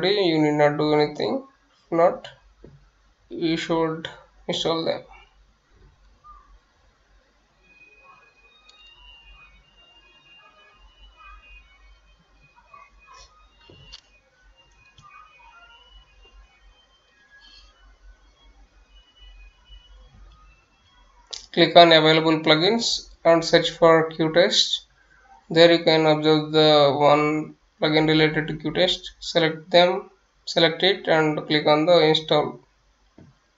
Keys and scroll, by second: 17.9-19.7 typing, 21.3 Return.